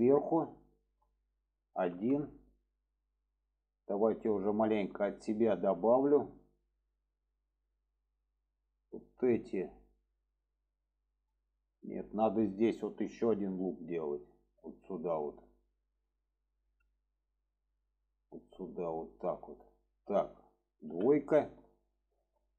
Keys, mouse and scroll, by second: 0.6 shift+middle drag, 5.1-8.1 middle drag, 8.5 middle click, 9.2 click, 9.7-11.9 middle drag, 14.8 click, 15.9 click, 16.6 click, 17.1 click, 18.1-19.1 drag, 19.4 click, 22.3 click.